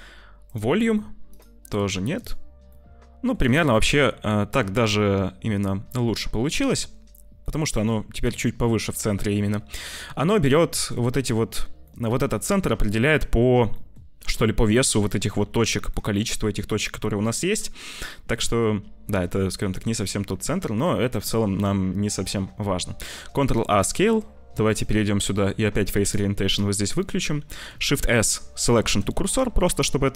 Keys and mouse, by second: 1.3 click, 2.6 middle click, 3.4-5.5 drag, 7.3 middle click, 8.7 middle click, 10.1 middle click, 11.8 middle click, 13.0 middle click, 13.6 middle click, 14.2 middle click, 15.2 Tab, 15.8-17.1 drag, 17.9 click, 19.0 Tab, 19.5 click, 22.5 ctrl+a, 24.7-26.6 drag, 27.0 middle click, 27.8 shift+s, 29.3-30.1 middle drag.